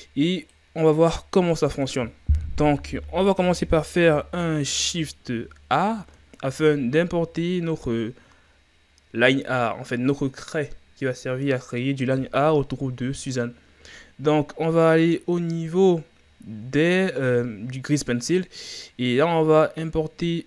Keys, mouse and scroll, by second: 0.4 click, 1.6-3.9 middle drag, 3.9 KP_1, 5.4-6.3 scroll down 4, 6.3 shift+a.